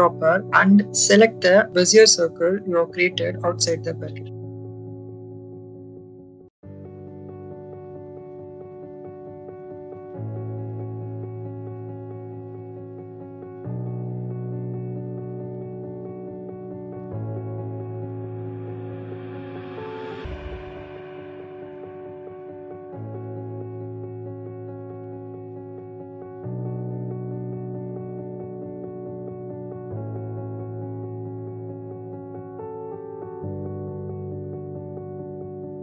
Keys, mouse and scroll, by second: 4.4-8.7 middle drag, 10.7 click, 13.5 click, 15.4 shift+middle click, 16.2-17.8 middle drag, 19.0 Tab, 20.3 a, 21.1 r, 22.3-25.8 typing, 23.1 click, 26.0 click, 27.7 Tab, 29.0-30.9 drag, 31.9 shift+middle click, 33.2-35.6 drag.